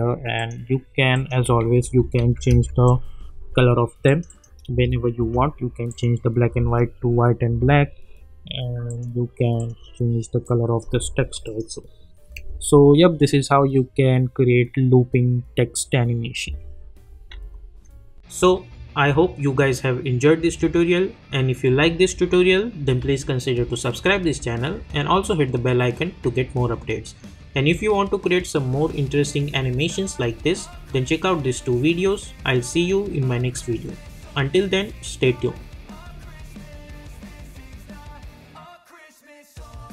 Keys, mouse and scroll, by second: 2.0-3.1 typing, 4.0 click, 4.7 space, 5.9 click, 6.5 space, 8.9 click, 12.3 space, 16.4 space, 17.3 ctrl+z.